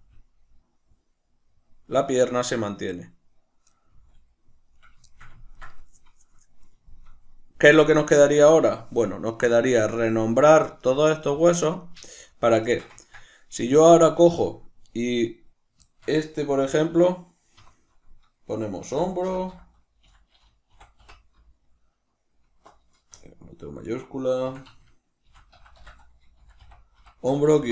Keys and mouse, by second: 2.9 right click, 3.8 middle click, 3.8 g, 4.8 right click, 5.0-9.2 shift+middle drag, 9.2 right click, 9.8 right drag, 10.4 right click, 10.7 right drag, 11.1 right click, 11.8 right click, 12.2 right click, 12.6-13.5 ctrl+shift+middle drag, 13.5 right click, 14.0-27.7 shift+middle drag, 17.5 F2.